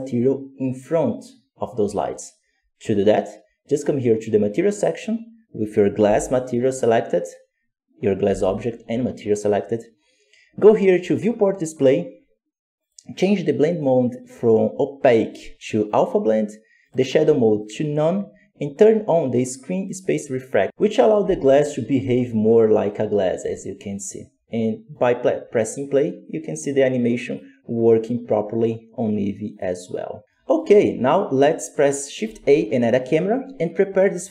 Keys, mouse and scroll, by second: 5.9 g, 8.2 g, 16.7-20.7 drag, 21.1 g, 24.9-30.2 drag, 30.2 middle click, 30.5-32.2 scroll up 2, 32.2-32.8 scroll up 1, 34.0 shift+a.